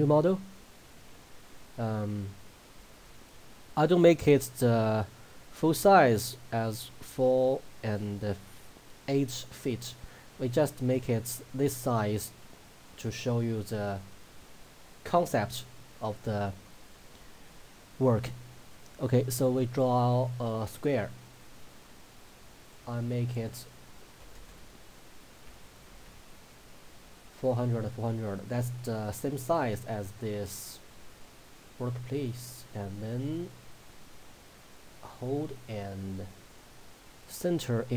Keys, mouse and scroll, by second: 12.9 click, 19.1 click, 25.5 Tab, 30.6 right click.